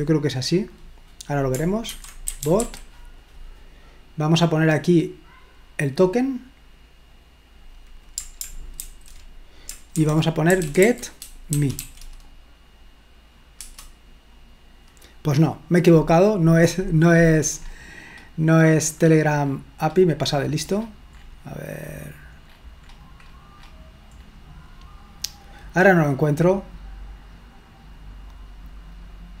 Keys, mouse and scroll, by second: 2.0-3.1 typing, 5.3-8.1 drag, 8.8 ctrl+alt+v, 9.9-11.8 typing, 13.6 Return, 16.7-22.4 scroll up 2, 22.5-22.9 scroll up 2, 24.3-24.9 scroll up 1, 26.5-29.4 drag.